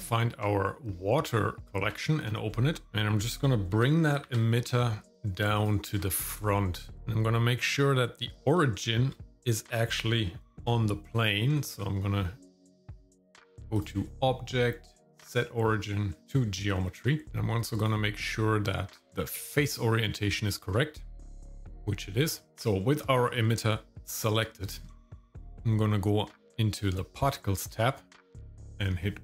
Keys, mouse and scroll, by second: 1.6 shift+middle click, 1.6 click, 2.9 shift+middle click, 2.9 scroll up 2, 3.7 g, 6.0 shift+middle click, 6.5 middle click, 7.0 shift+middle click, 8.6 shift+middle click, 13.7-16.2 drag, 16.8-17.3 scroll up 1, 17.3 shift+middle click, 17.8-19.8 drag, 20.4-22.2 shift+middle drag, 24.1 click, 24.9 shift+middle click, 27.2 click.